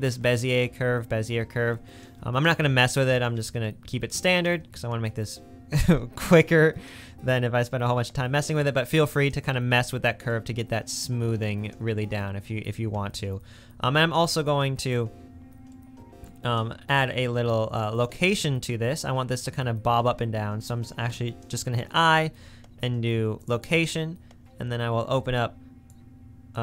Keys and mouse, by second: 12.4 space, 15.9-16.4 middle drag, 21.1 i, 25.2 click.